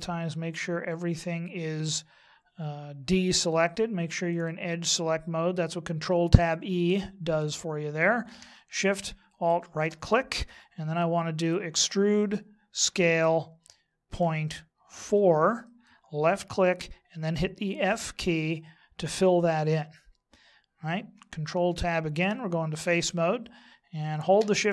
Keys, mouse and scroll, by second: 4.3 click, 9.4 alt+shift+right click, 11.7 e, 17.9 f, 21.5 ctrl+Tab.